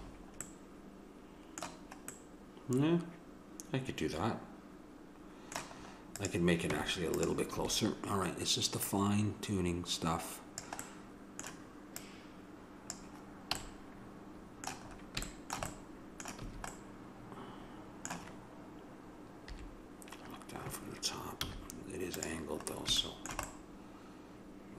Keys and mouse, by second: 0.5 middle click, 3.9 middle click, 5.8 middle click, 6.2 click, 6.7 Tab, 7.6 a, 12.0-13.8 drag, 13.6 a, 16.8 a, 19.5 KP_7, 21.5 z, 22.7 middle click, 23.2-24.7 middle drag.